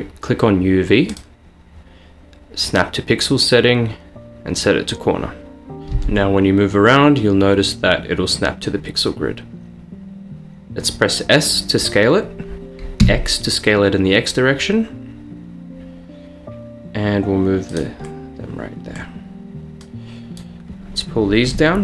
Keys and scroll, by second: 6.0 g, 10.7 s, 13.1 x.